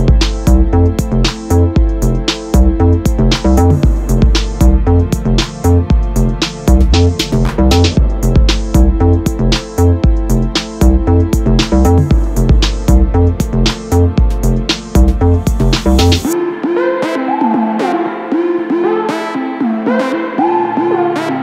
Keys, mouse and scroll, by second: 0.1 g, 4.0 r, 6.0-8.8 middle drag, 8.8 r, 14.0-15.7 middle drag, 15.7 g, 18.3 middle click, 19.2 KP_7, 19.8 Tab, 21.1 3.